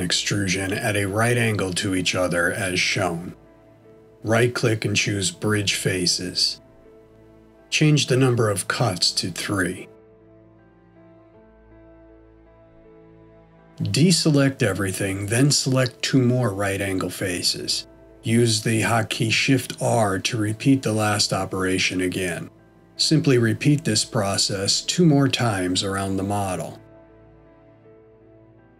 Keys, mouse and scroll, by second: 2.8 click, 4.1 shift+click, 5.9 right click, 10.3 click, 10.5 click, 10.9 click, 14.5 middle click, 15.9 shift+middle click, 17.7 click, 18.6 shift+click, 20.0 shift+r, 21.9 middle click, 23.5 shift+middle click, 25.6 click, 26.7 shift+click, 27.8 shift+r.